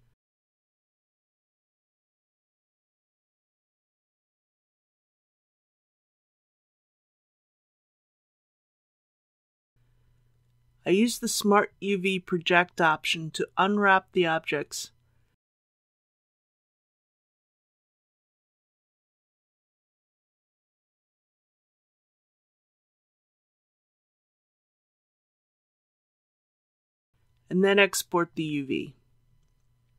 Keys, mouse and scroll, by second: 4.1 click, 5.2 click, 6.4-6.8 typing, 7.1 Return, 8.4 shift+click, 9.4 Tab, 12.4 a, 18.8 u, 20.4-29.5 drag.